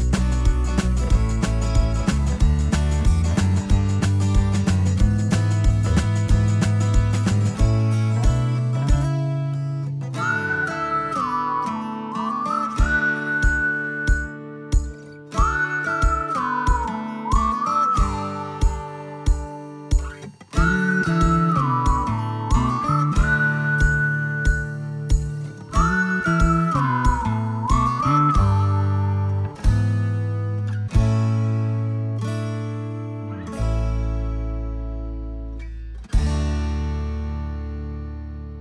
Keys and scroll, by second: 4.6 l, 6.9 space, 10.1 p, 11.7 space, 16.4 space, 20.5 ctrl+z, 25.9 i, 27.9 space, 33.6 l, 35.4 space, 36.5 p.